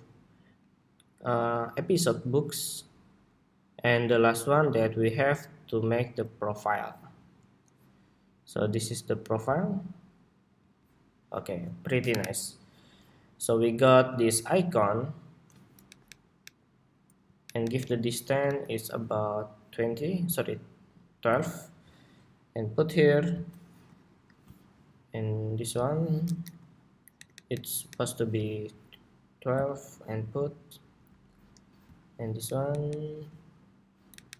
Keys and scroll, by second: 14.7 super+=, 18.5 alt+Down, 20.2 alt+Down, 29.8 alt+Down, 30.3 alt+Down, 30.6 alt+Down.